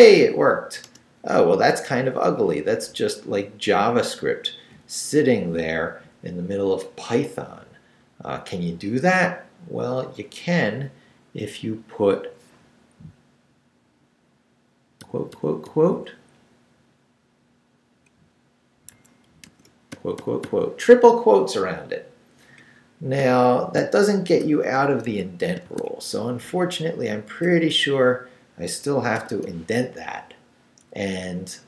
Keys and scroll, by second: 0.8 Return, 1.7 Down, 2.6 Up, 15.0 -, 16.4 Down, 18.9 Escape, 19.5 shift+a, 19.9 shift+', 23.6 shift+v, 24.4 shift+BackSpace, 25.1 Escape, 25.6 shift+Escape, 25.7 shift+v, 25.9 shift+Up, 26.9 Up, 27.8 Up, 28.8 shift+Up, 29.2 shift+., 31.1 Left.